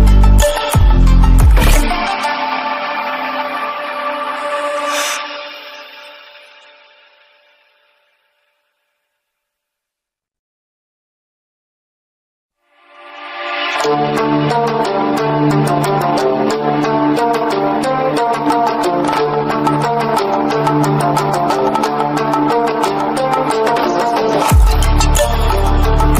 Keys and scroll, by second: 20.8 ctrl+=, 24.1 ctrl+-.